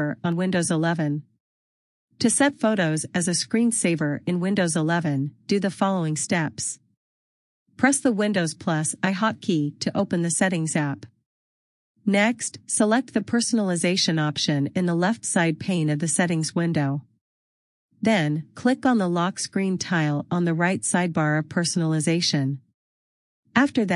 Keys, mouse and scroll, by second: 10.6 super+i, 14.3 click, 18.7 scroll down 1, 20.9 click, 23.2-23.9 scroll down 1.